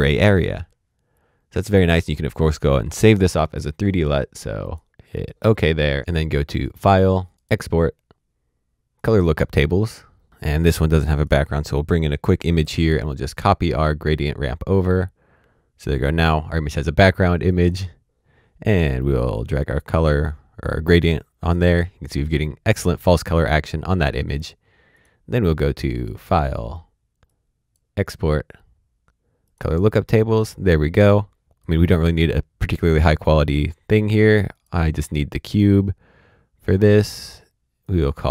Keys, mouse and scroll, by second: 5.1 click, 7.3 click, 8.9 click, 11.1 click, 17.5 click, 19.5 click, 30.8 click, 31.4 click, 34.5 click, 37.8 click.